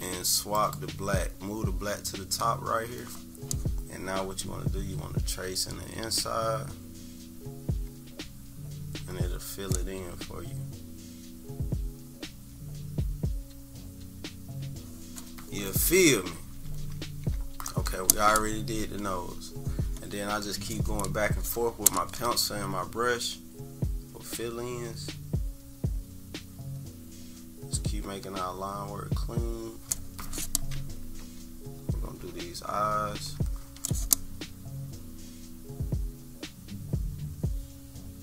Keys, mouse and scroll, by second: 0.6 click, 4.4-14.6 drag, 16.4 -, 16.7 -, 17.1 =, 17.2 =, 17.4 scroll down 2, 19.0 click, 23.4-29.4 drag, 31.3-32.8 typing, 31.8-32.9 scroll up 6, 33.6 scroll up 2, 35.7 click.